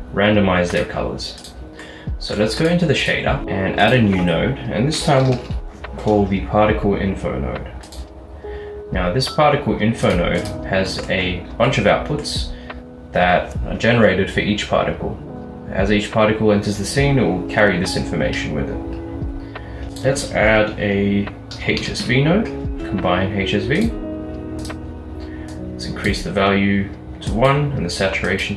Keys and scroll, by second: 3.4 a, 5.0-5.6 typing, 19.9 a, 21.6-22.1 typing.